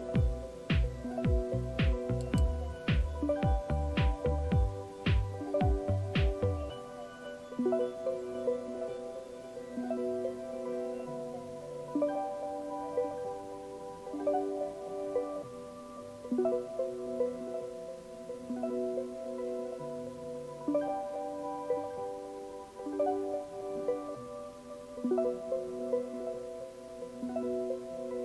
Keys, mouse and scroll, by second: 2.2 click.